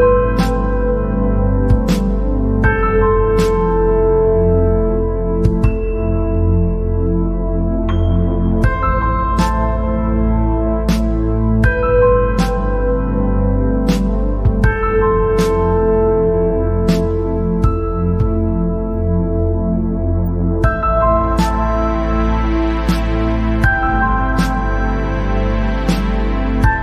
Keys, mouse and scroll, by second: 0.0 scroll up 1, 0.9 click, 2.1-3.9 drag, 4.4 alt+click, 5.4 scroll, 5.7-7.1 middle drag, 7.1 alt+click, 9.0 alt+click, 10.8 alt+click, 12.9 alt+shift+click, 15.8 ctrl+b, 24.7 scroll up 1.